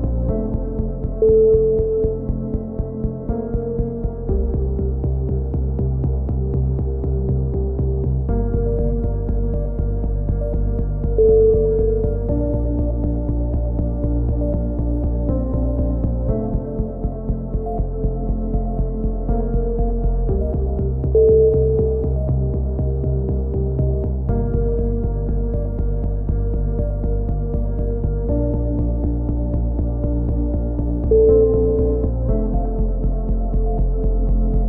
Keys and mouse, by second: 5.8-6.3 drag, 6.3 middle click, 6.7 g, 8.5 a, 8.6-10.7 middle drag, 14.3-16.2 typing, 15.2-16.2 drag, 19.8 r, 21.2-22.3 drag, 22.3 a, 22.4 z, 24.2 ctrl+l, 24.9-27.7 drag, 27.9 a, 28.2 drag, 30.5 KP_3, 31.6-32.4 drag, 32.0 ctrl+l, 32.4 r.